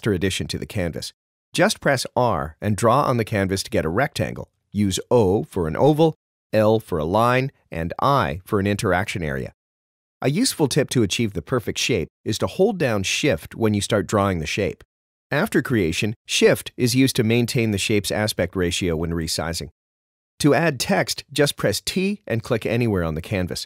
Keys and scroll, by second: 2.3 r, 5.1 o, 6.5 i, 8.0 i, 20.8 t.